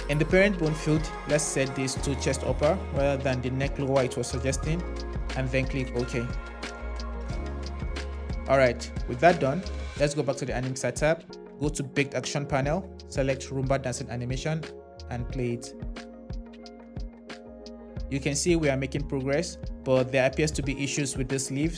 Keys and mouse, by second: 7.8 click, 10.4 click, 12.4 click, 15.2 space, 20.4 click.